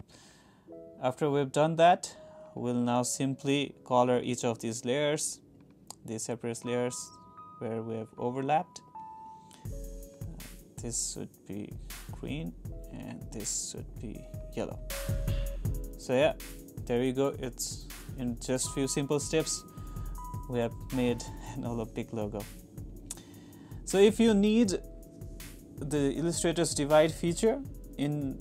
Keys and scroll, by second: 5.0 ctrl+c, 8.8 ctrl+c, 10.9 ctrl+c, 13.8 ctrl+c, 17.9 super+-.